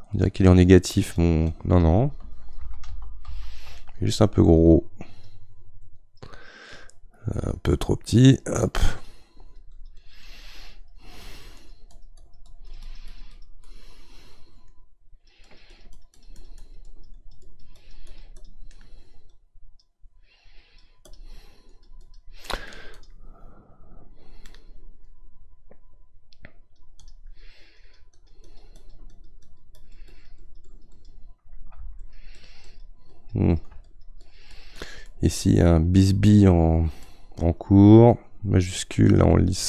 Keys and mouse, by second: 2.6 ctrl+z, 2.9 ctrl+z, 3.3 ctrl+z, 4.8-6.0 right drag, 6.0-7.8 drag, 7.8-9.4 right drag, 9.4-13.7 drag, 13.7-15.1 middle drag, 15.1-19.4 drag, 19.4-21.7 right drag, 21.7-25.3 drag, 25.3-27.8 right drag, 27.8-35.1 drag, 35.1-37.0 middle drag, 37.0-39.6 shift+drag.